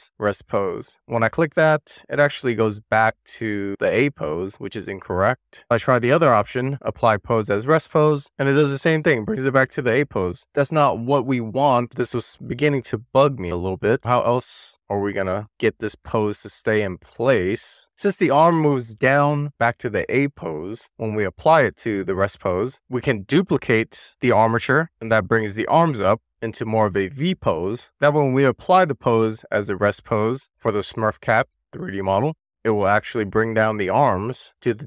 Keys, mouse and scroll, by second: 4.0 super+z, 5.2-9.1 drag, 9.6 super+z, 10.6-21.0 drag, 24.7 click, 27.9 click, 28.8-32.0 drag.